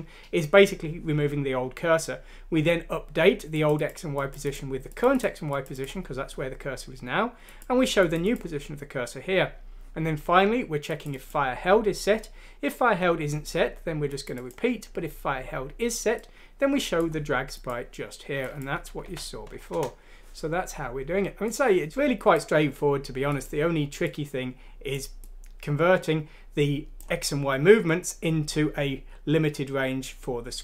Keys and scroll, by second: 19.0 F6, 19.7 Return.